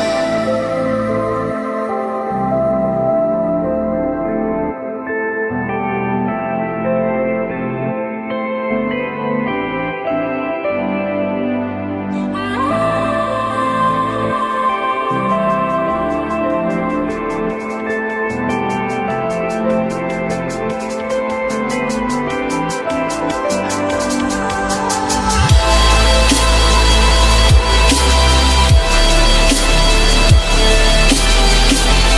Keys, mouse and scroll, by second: 5.7 ctrl+click, 6.8 ctrl+click, 10.5 ctrl+click, 11.2 ctrl+click, 11.3 ctrl+click, 12.5 ctrl+click, 12.6 ctrl+click, 14.5 ctrl+click, 14.5 ctrl+click, 15.3 ctrl+click, 17.2 alt+middle click, 18.1 alt+middle click, 19.1 ctrl+click, 19.7 ctrl+click, 21.3 ctrl+click, 21.4 ctrl+click, 23.3 alt+middle click, 24.7 ctrl+click, 25.3 ctrl+click, 25.4 ctrl+click, 26.3 alt+middle click, 27.6 ctrl+click, 28.4 ctrl+click, 29.4 ctrl+BackSpace, 30.2 ctrl+z, 32.0 alt+middle click, 32.1 alt+middle click.